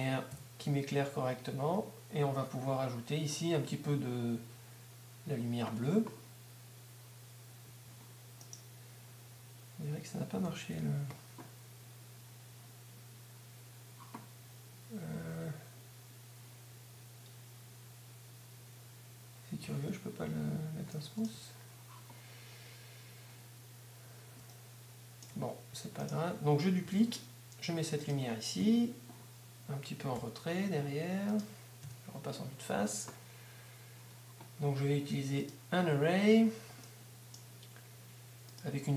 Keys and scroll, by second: 0.3 F12, 7.7 Escape, 10.7-11.5 typing, 12.8 t, 26.9 shift+d, 30.8 g, 32.8 1.